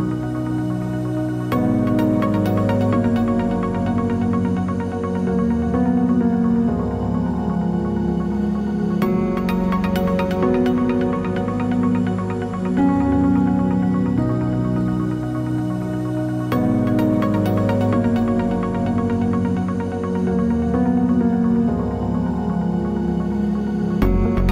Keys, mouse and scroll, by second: 0.8 ctrl+z, 19.1 click, 21.6 p, 21.7 KP_Enter, 22.8 Tab, 23.4 click.